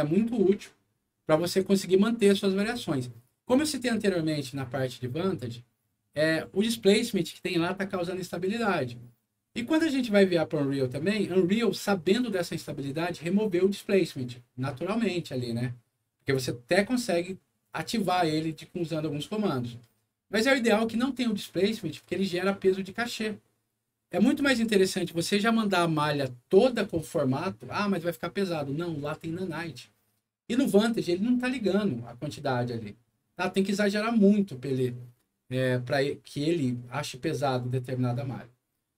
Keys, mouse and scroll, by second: 1.3 click, 3.4 click.